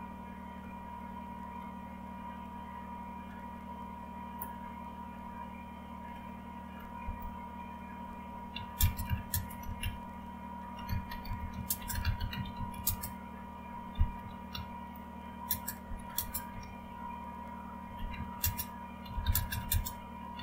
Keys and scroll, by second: 1.8 alt+Tab, 7.0 Return, 8.5-20.4 typing.